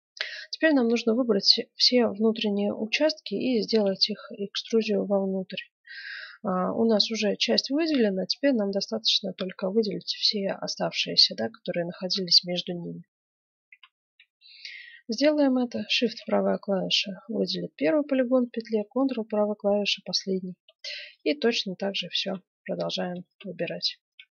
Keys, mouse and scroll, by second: 0.4-1.8 scroll up 1, 1.8 middle click, 4.1-6.5 middle drag, 13.6 F9, 15.9-17.7 right drag, 18.6-20.4 right drag, 20.4 middle click, 21.0-22.1 drag, 22.1-24.3 right drag, 22.5-24.1 middle drag.